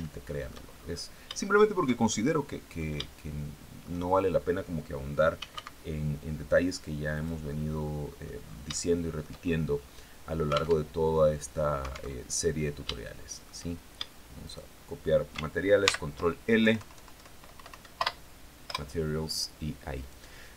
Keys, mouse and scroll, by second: 0.4 scroll up 2, 0.9 shift+middle click, 1.5 shift+middle click, 1.5 shift+right click, 4.6-5.5 typing, 6.6 click, 7.9 scroll down 3, 8.2 shift+right click, 8.2 shift+click, 9.2 scroll up 2, 10.2 alt+Tab, 11.6 alt+Tab, 12.3 shift+click, 13.9 shift+right click, 15.3 ctrl+l, 16.1 Down, 17.0 Up, 18.1 Return, 19.4 right click, 20.3 click.